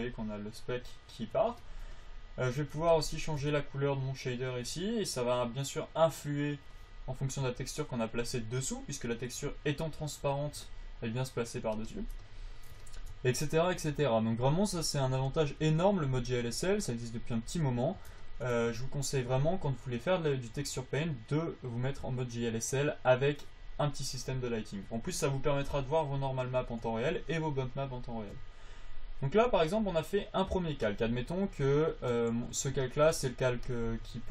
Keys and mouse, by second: 4.2-6.0 drag, 8.9-11.4 drag, 14.0-15.7 drag, 15.9 f, 16.7-18.5 drag, 25.8-28.9 drag, 32.7 f, 33.6 f, 33.9-34.3 drag.